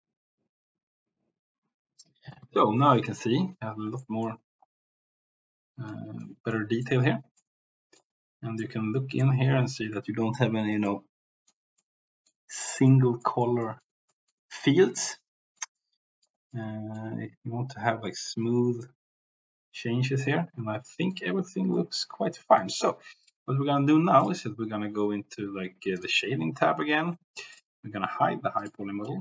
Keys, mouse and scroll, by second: 3.9 shift+middle click, 5.8 middle click, 6.5 middle click, 7.4 middle click, 8.6 middle click, 10.9 middle click, 11.7 middle click, 12.6 middle click, 13.2 middle click, 13.6 middle click, 14.0 middle click, 15.0 middle click, 15.7 middle click, 16.5 middle click, 20.8 middle click, 21.7 middle click, 23.2 click, 26.7 click, 27.5 click, 28.6 click.